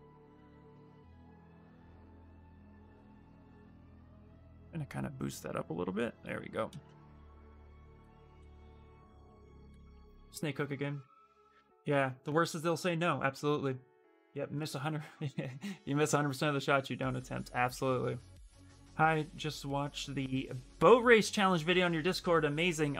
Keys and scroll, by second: 2.1 b, 7.9-10.2 typing.